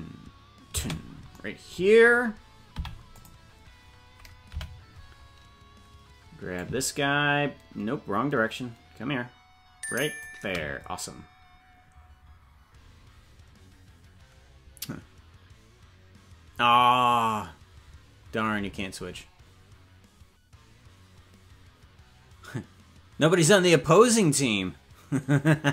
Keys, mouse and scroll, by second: 2.7 i, 4.6 Right, 6.6-10.3 drag.